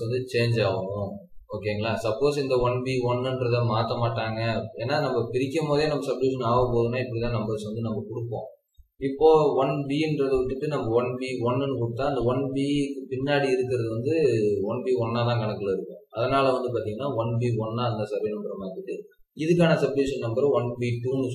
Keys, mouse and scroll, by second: 2.2 scroll up 1.